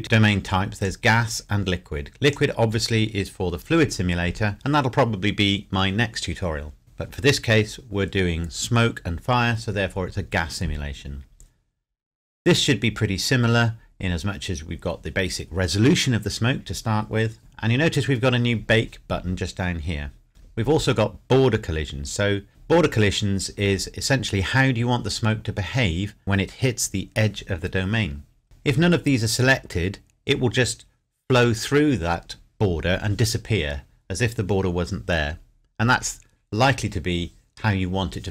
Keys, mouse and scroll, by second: 0.8 click, 3.6 click, 17.4-19.0 scroll down 1, 21.0-21.8 scroll down 1, 28.0-28.4 scroll up 1.